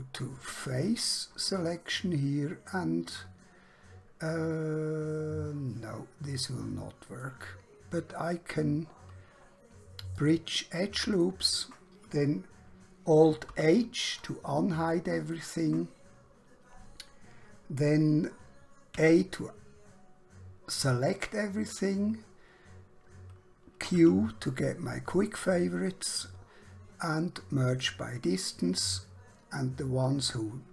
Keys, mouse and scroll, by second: 0.7 click, 7.2 right click, 10.1 click, 13.4 alt+h, 15.4 click, 18.9 a, 24.0 q, 27.6 click.